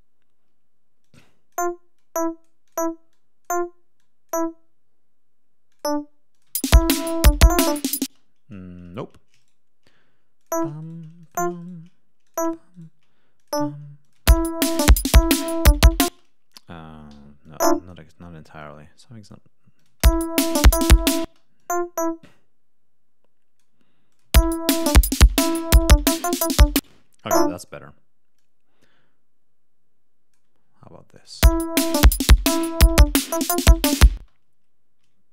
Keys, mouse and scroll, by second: 1.0 click, 1.9 click, 3.0 click, 3.9 click, 5.7 click, 6.3 click, 6.5 space, 8.0 space, 9.3 shift+right click, 10.3 click, 10.8 shift+right click, 11.2 shift+click, 11.5 shift+right click, 12.2 shift+click, 12.7 shift+right click, 13.3 shift+click, 14.0 click, 14.1 space, 16.0 space, 17.1 e, 17.4 click, 18.5 click, 19.7 click, 19.9 space, 21.2 space, 21.5-23.7 drag, 24.1 click, 24.2 space, 26.7 space, 26.9 e, 27.2 click, 28.3-30.5 drag, 31.1 click, 31.3 space, 34.1 space, 35.0 d.